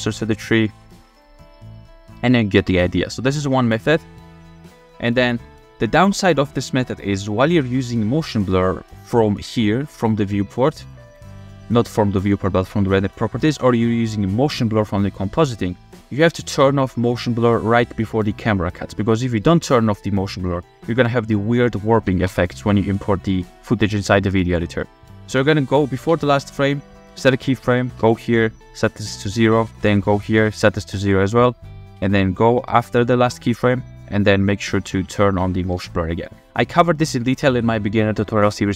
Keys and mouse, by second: 0.0-0.8 typing, 2.3 click, 2.6 space, 4.9 space, 5.3-6.1 drag, 8.9 click, 10.8 click, 16.3 click, 18.0-22.2 drag, 22.3 Right, 23.7 click, 25.1 click, 26.1 Left, 28.0 Right, 29.7 Right, 32.0 Right.